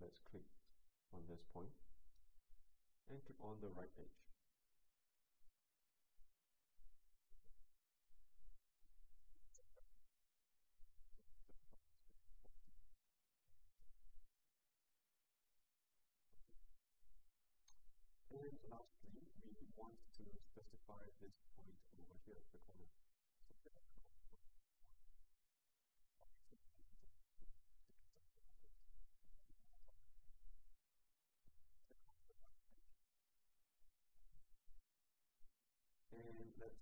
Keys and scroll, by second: 11.9-12.9 typing.